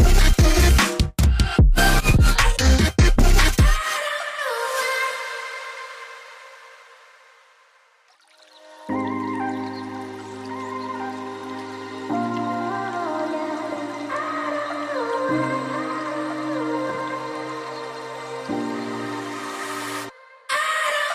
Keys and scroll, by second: 2.4 ctrl+shift+], 13.2 ctrl+shift+], 20.9 ctrl+shift+].